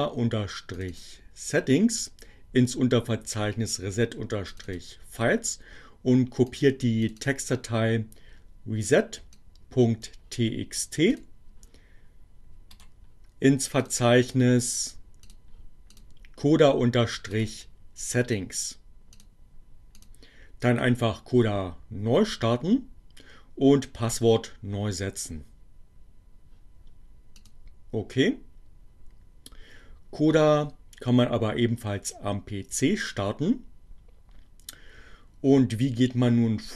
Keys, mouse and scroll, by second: 0.2-1.3 drag, 2.8-5.0 drag, 5.8-6.8 drag, 7.2 click, 9.0-10.3 drag, 11.1 click, 12.4-13.6 right drag, 13.6 click, 15.4 click, 16.0 click, 16.4-17.7 right drag, 19.2 click, 19.8 click, 26.5-27.6 drag.